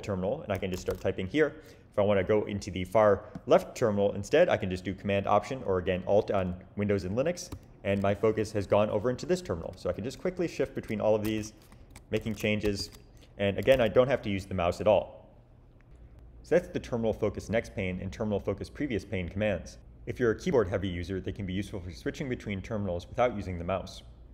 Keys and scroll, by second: 0.4-1.4 typing, 7.5 alt+super+Left, 10.0 alt+super+Right, 11.0-14.3 typing.